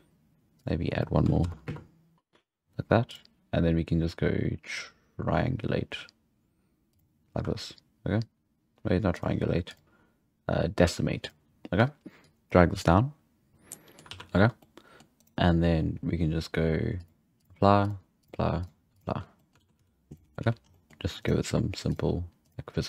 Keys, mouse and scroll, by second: 0.6 click, 1.4 shift+Left, 1.6 space, 2.1 Right, 3.0-6.1 drag, 9.1-13.5 drag, 13.5 scroll down 2, 13.7-14.1 middle drag, 14.1 alt+a, 14.6-15.1 middle drag, 15.1-15.9 right drag, 16.9-19.3 drag, 19.3 middle click, 19.6 alt+a, 19.7 z, 20.0 scroll down 1, 20.1 middle click, 20.4 z, 20.6 scroll up 2, 20.7-21.2 middle drag, 21.2-21.8 right drag, 21.8 click, 22.4-22.8 drag.